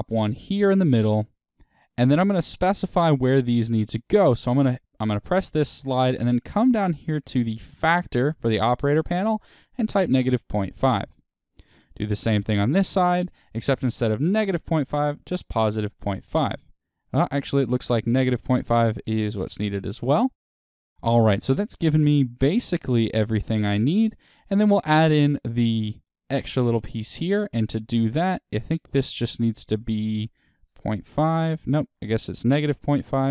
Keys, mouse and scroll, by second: 0.0 click, 4.7-7.2 drag, 10.9 KP_Enter, 12.9 click, 13.8 click, 16.0-20.5 drag, 16.1 KP_Enter, 19.5 KP_Enter, 20.5-26.8 middle drag, 26.8-33.3 drag, 31.1 KP_Enter.